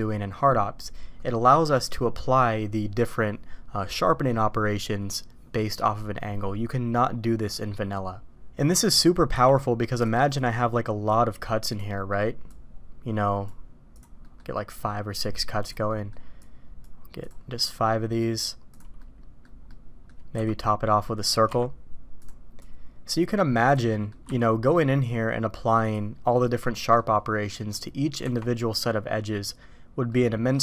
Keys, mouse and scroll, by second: 9.3 d, 10.4-11.8 drag, 11.9 middle drag, 12.4-14.0 drag, 14.2 middle click, 14.7-15.7 drag, 15.9 middle drag, 16.4-17.3 drag, 17.7-18.8 drag, 19.0-19.4 middle drag, 19.7-20.1 middle drag, 20.3 f, 21.5 d, 22.6-23.8 drag, 23.9 middle click, 24.3 q, 26.4-27.0 middle drag, 27.5 middle drag, 28.2 Tab, 30.0 middle click.